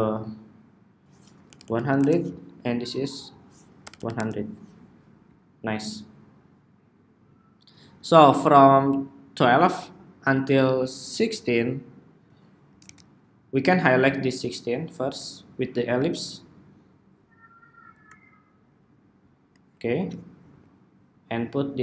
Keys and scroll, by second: 12.6 super+=.